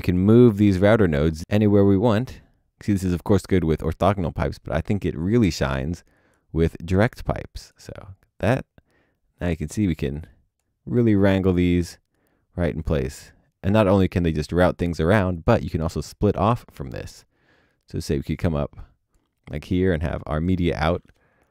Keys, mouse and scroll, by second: 4.4 alt+click.